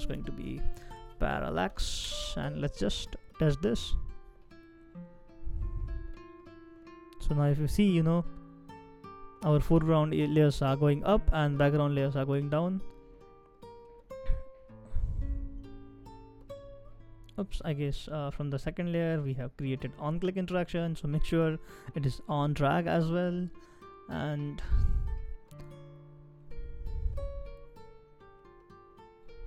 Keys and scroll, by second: 1.4 i, 1.5 i.